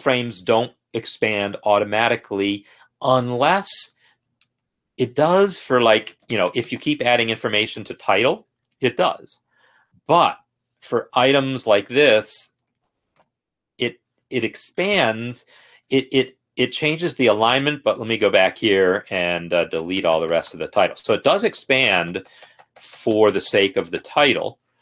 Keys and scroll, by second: 4.7 End, 5.2 Return, 5.5-7.0 typing, 5.6 Return, 5.8 Return, 6.1 Return, 6.3 Return, 6.7 Return, 6.9 Return, 7.6 Escape, 11.4 End, 11.9 Return, 12.3-13.3 typing, 12.4 Return, 12.7 Return, 13.1 Return, 14.0 Escape, 19.9-21.3 Down, 21.3 End, 21.8-23.3 typing.